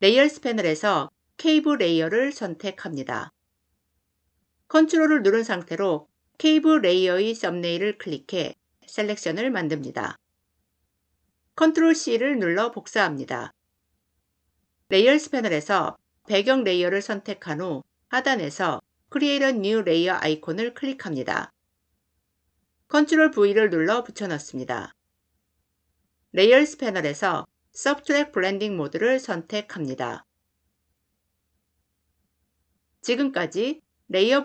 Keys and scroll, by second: 11.6 ctrl+c, 22.9 ctrl+v.